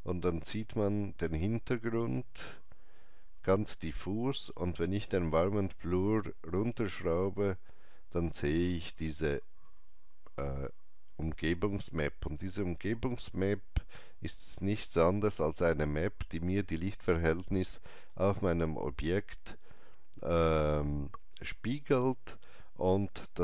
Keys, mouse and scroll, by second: 6.2-17.6 drag, 12.7 alt+right click.